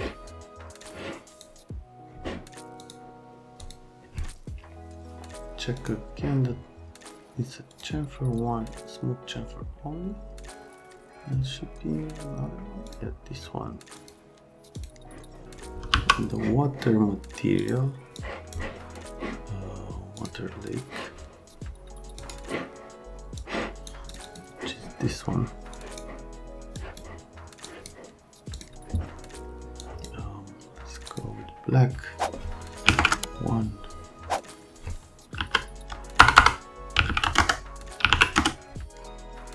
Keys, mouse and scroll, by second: 0.8 click, 2.8 click, 3.6 click, 5.7 click, 7.7 click, 12.9 click, 13.9 click, 14.7 click, 15.9 n, 17.6 click, 18.1 click, 20.2 click, 22.2 click, 23.3 click, 24.1 click, 24.2 click, 25.7 click, 26.7 click, 27.6 click, 28.5 click, 29.8 click, 31.1 click, 32.8 KP_1, 32.9 KP_Enter, 35.4-38.1 typing, 37.3 KP_Enter, 38.4 KP_Enter, 39.3 click.